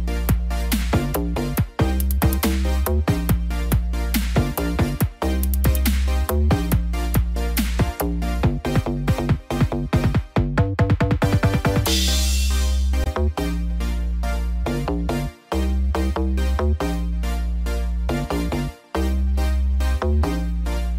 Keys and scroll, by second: 5.4 shift+F5.